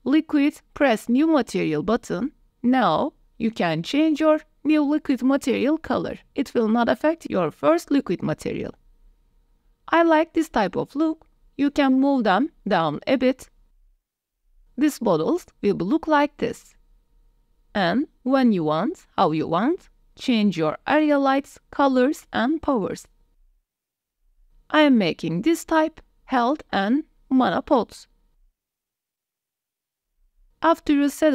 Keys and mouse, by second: 2.6 click, 4.1 click, 8.4 click, 9.1 KP_0, 10.6 a, 10.9 click, 11.3 click, 12.0 g, 12.4 z, 14.2 click, 14.5 g, 14.6 z, 15.7 q, 15.7 w, 16.4-16.7 drag, 17.4 click, 17.7-18.0 drag, 18.6 g, 18.9 x, 20.4 KP_0, 20.9 r, 21.6 click, 22.2 click, 23.0 KP_0, 23.6 click, 23.8 click, 24.4 KP_0, 25.0 KP_0, 25.7 r, 26.6 ctrl+s, 29.2 click, 29.6-31.3 typing, 30.6 middle click.